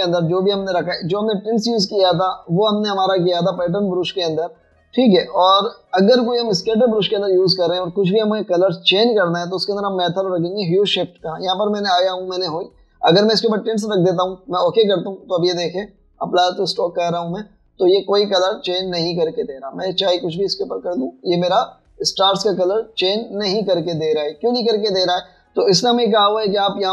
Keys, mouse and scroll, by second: 19.6 double click, 23.5 double click.